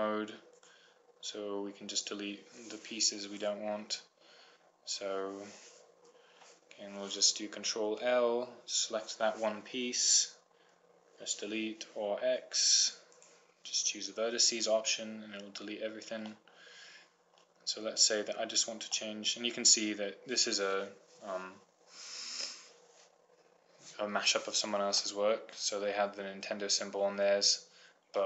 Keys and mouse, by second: 4.6-5.9 right drag, 9.0 ctrl+l, 11.2 Delete, 16.9 middle click, 18.4 middle click, 19.8 middle click, 21.4 middle click, 25.6-26.8 middle drag, 27.2 middle click.